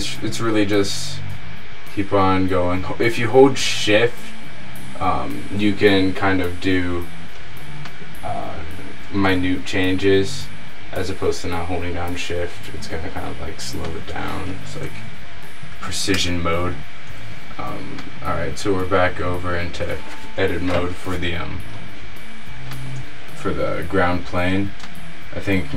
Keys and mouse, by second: 8.0 middle click, 8.1 click, 9.3 r, 16.2 Tab, 19.0 Tab, 19.8 click, 20.4 a, 20.9 a, 22.9-24.3 drag, 24.8 middle click.